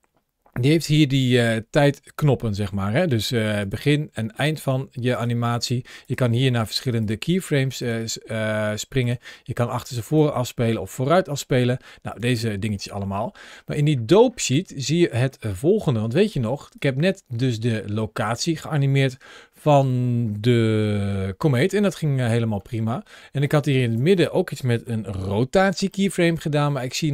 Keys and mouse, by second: 3.5 click, 4.2 click, 5.0 click, 5.5 click, 5.9 click, 6.4 click, 6.9 click, 7.7 click, 7.8 click, 8.9 click, 9.9 click, 11.2 click, 11.9 click, 13.5 middle click, 14.4 middle click, 16.1 click, 17.7-18.1 middle drag, 18.9 KP_Decimal, 19.9 middle click, 21.7-23.9 drag, 24.8 shift+middle drag, 25.8 shift+middle click, 26.1-26.6 middle drag, 26.8 shift+middle drag.